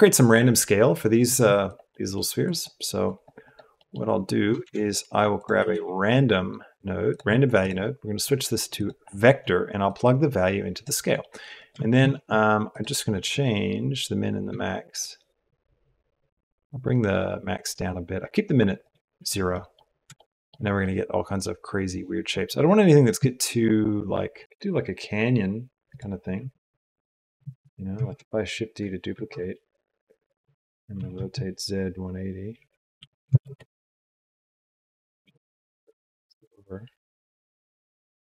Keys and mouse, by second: 2.4 click, 3.0 click, 4.6 shift+a, 8.2-8.8 drag, 9.9-11.0 drag, 11.0 middle click, 12.0 shift+a, 16.2-18.8 shift+middle drag, 19.5 middle click, 19.5 click, 20.0 shift+middle click, 20.8 click, 24.4 r, 28.9 shift+d, 31.6 r, 35.8 g.